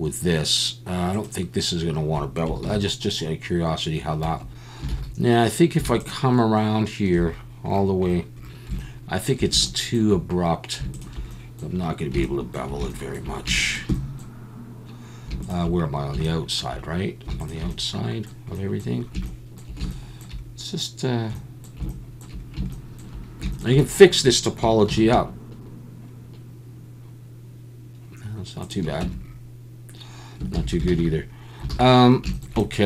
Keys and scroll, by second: 2.6 ctrl+b, 4.2 Escape, 4.9 alt+a, 24.9 ctrl+b, 29.0 Tab, 30.5 ctrl+z, 30.9 ctrl+z, 31.7 alt+a.